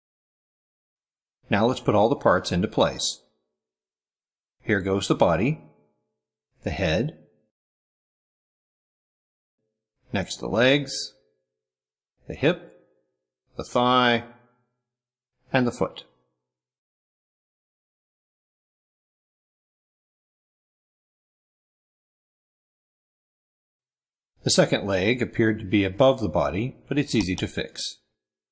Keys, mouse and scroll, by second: 1.7 ctrl+scroll up 1, 2.5 ctrl+click, 3.1 drag, 3.4-3.9 drag, 4.0 ctrl+scroll up 1, 4.2 ctrl+middle click, 4.6 click, 5.2 click, 5.9 middle click, 6.3 click, 6.7 click, 7.1 middle click, 7.6-7.9 drag, 8.2 click, 9.4 middle drag, 9.9 middle drag, 10.2 middle click, 10.9 click, 11.2 click, 11.7 click, 12.3 click, 12.9 middle drag, 13.3 drag, 13.7 click, 14.2 click, 14.7 click, 15.9 click, 16.2 click, 16.7 click, 18.2 middle click, 18.4 click, 18.6 click, 18.9 click, 19.1 click, 19.5 click, 19.9 middle click, 20.1 click, 20.2 middle click, 20.4 click, 20.6 click, 20.9 click, 21.1 click, 21.3 click, 21.8 click, 22.2 middle click, 22.4 click, 22.8 click, 23.1 click, 23.4 click, 24.4 middle click, 24.9-26.7 middle drag, 27.0 click.